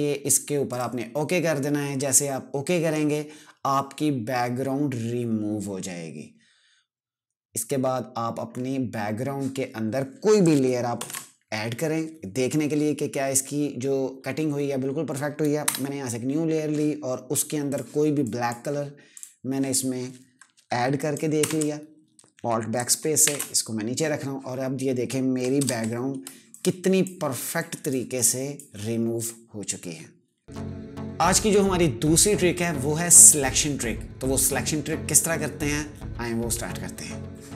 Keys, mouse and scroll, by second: 10.1 ctrl+Num_Lock, 10.7 ctrl+shift+n, 15.3 Return, 17.4 click, 21.1 alt+BackSpace, 22.9 ctrl+shift+[, 25.3 ctrl+KP_Add, 25.9 space, 26.2 click, 26.4 space, 27.3 click, 27.4 space, 27.9 click, 27.9 space, 37.3 click.